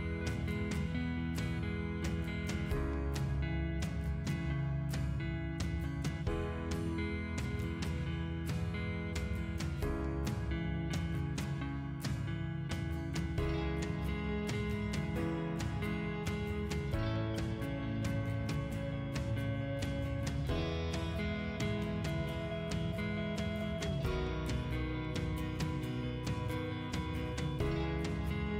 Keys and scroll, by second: 0.8 Delete, 1.9-2.8 typing, 11.1-12.0 typing, 22.5 c, 23.1 space.